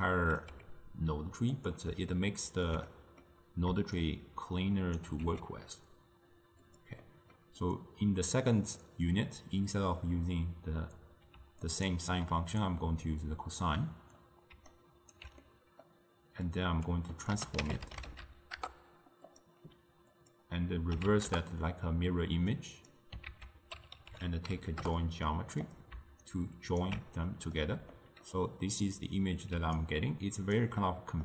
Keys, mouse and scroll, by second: 0.6 g, 2.2-4.0 ctrl+middle drag, 4.0-5.3 shift+right drag, 5.3 g, 7.1-7.7 middle drag, 7.7 click, 8.9 click, 11.4 d, 11.8-12.1 drag, 12.1 d, 12.2 d, 13.1-14.6 drag, 14.6 d, 14.8 right click, 15.2 d, 15.5-16.6 middle drag, 16.6-19.4 drag, 20.3-23.3 drag, 23.3 ctrl+a, 26.3-27.4 alt+right drag, 27.4-29.6 middle drag, 29.6 d, 29.9 right click, 30.7 d, 31.0 middle click.